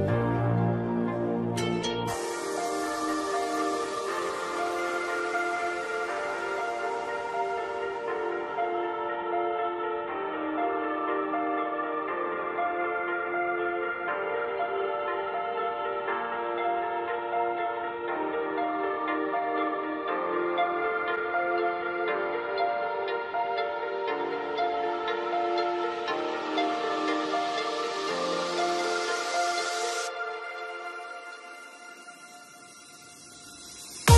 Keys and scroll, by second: 7.5 ctrl+t, 9.7 Return.